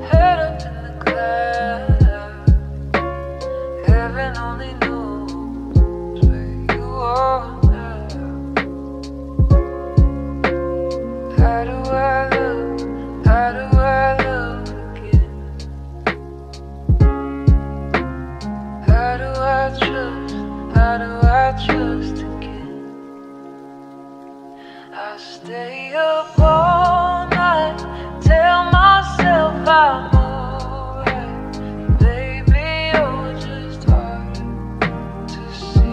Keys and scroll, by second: 11.4 ctrl+d.